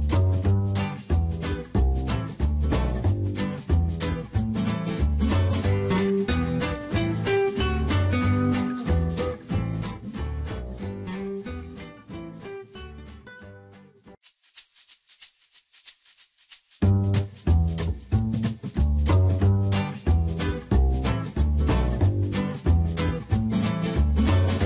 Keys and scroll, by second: 15.2 ctrl+z.